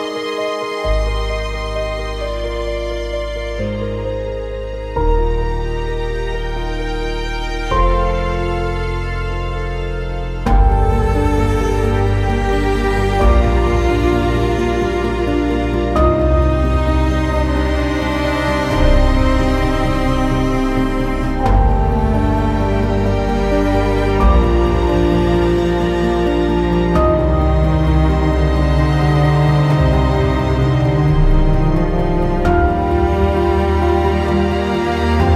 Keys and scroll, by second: 17.7 Escape, 18.2 ctrl+z, 19.2 ctrl+z, 19.7 Escape, 20.5 ctrl+z.